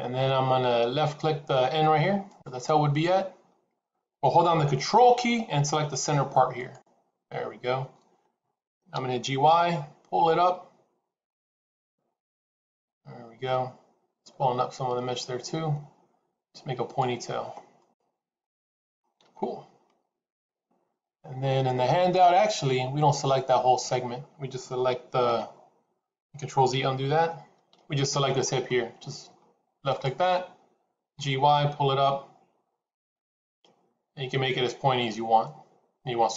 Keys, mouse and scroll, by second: 1.1-2.0 scroll down 1, 2.1 click, 6.5 ctrl+click, 8.8 g, 17.1-17.7 scroll down 2, 17.7 middle click, 26.7 ctrl+z, 27.6 KP_7, 29.7 click, 30.9 g.